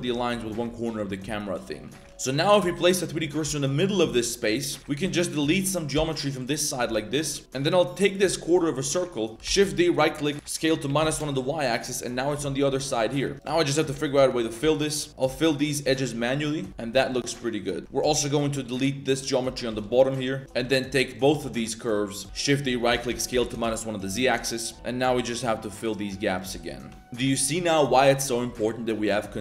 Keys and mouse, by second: 1.1 shift+click, 2.0 shift+click, 2.1 z, 2.4 click, 3.2 shift+click, 3.4 shift+s, 4.8 right click, 5.4 ctrl+middle click, 5.9 x, 7.4 ctrl+1, 9.4 shift+d, 10.3 s, 12.3 z, 12.8 shift+click, 13.1 z, 13.3 shift+click, 13.5 f, 13.9 click, 14.3 shift+click, 14.6-16.8 typing, 14.9 click, 15.1 ctrl+z, 15.2 click, 15.5 shift+click, 16.1 middle click, 16.4 right click, 17.0 alt+right click, 17.3 middle click, 17.8 ctrl+z, 19.7 x, 21.1 shift+click, 21.8 ctrl+click, 22.2 shift+d, 22.8 s, 24.6 shift+click, 24.6 shift+right click, 24.7-27.0 typing, 24.9 right click, 25.2 shift+right click, 25.3 right click, 25.5 ctrl+z, 25.6 shift+middle click, 26.1 middle click, 26.2 ctrl+z, 26.4 middle click, 26.5 click, 26.8 shift+click, 27.0 ctrl+z, 28.9 shift+z, 29.0 shift+click.